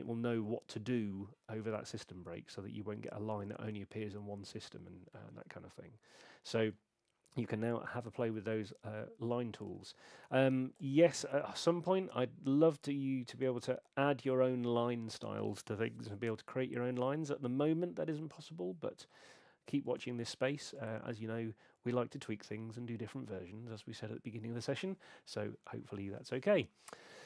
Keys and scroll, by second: 9.7 super+8.